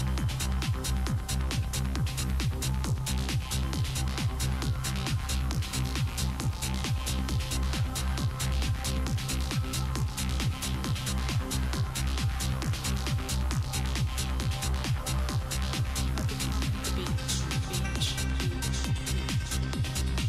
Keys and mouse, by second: 0.0 Tab, 1.1 click, 1.9-3.2 right drag, 3.2-8.2 drag, 4.0-5.2 right drag, 5.9-6.9 right drag, 8.1 middle click, 8.1 right click, 8.8 right click, 9.0 Tab, 10.3 ctrl+Tab, 10.8 ctrl+Tab, 11.7 g, 13.8 right click, 14.2 click, 15.3 g, 16.7-18.2 drag, 18.5 g, 19.7 ctrl+Tab.